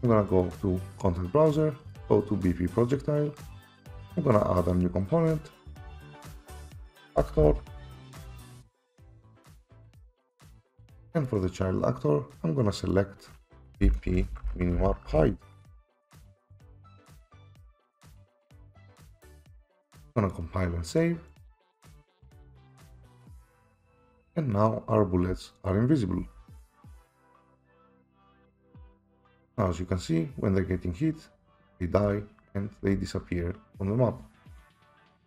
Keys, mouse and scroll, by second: 0.4 click, 1.9 click, 2.1 click, 4.3 click, 5.7-8.6 typing, 9.3 click, 10.3 click, 11.3 click, 12.9 click, 13.6-15.0 typing, 16.5 BackSpace, 16.8 BackSpace, 17.1 BackSpace, 17.5 BackSpace, 18.3 click, 20.3 click, 21.0 click, 21.4 click, 22.2 click, 23.1 right click, 24.2 right click, 25.3 d, 26.3 d, 27.4-28.6 typing, 27.6-28.5 scroll up 10, 32.0-32.9 typing, 33.3 scroll, 34.7-35.2 typing.